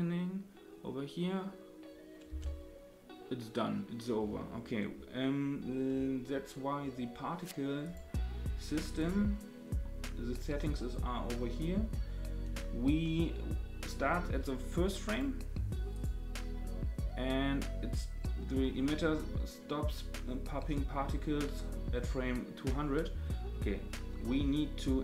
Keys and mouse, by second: 2.3 space, 7.8 click, 9.0 click, 15.9 click, 17.9 click.